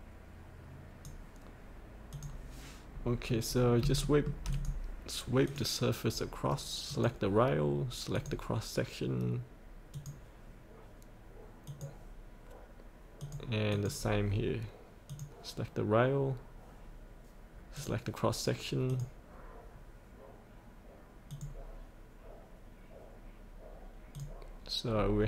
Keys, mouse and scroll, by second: 2.9-3.8 scroll up 1, 4.0 shift+middle click, 4.5 click, 19.6 click, 24.9-25.2 scroll up 1.